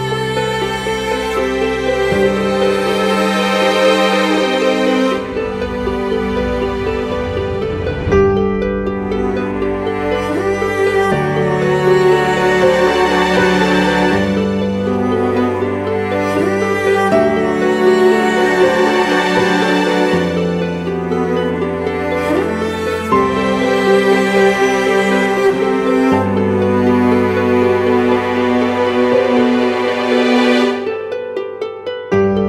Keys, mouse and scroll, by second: 10.9 e.